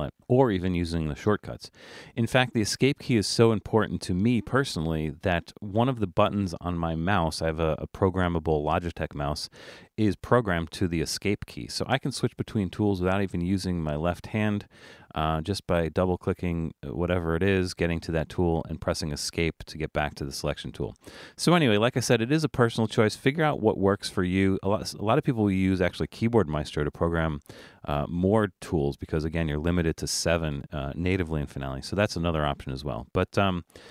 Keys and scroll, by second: 0.1 Escape, 10.9 Escape, 13.7 Escape, 14.8 Escape, 16.8 Escape.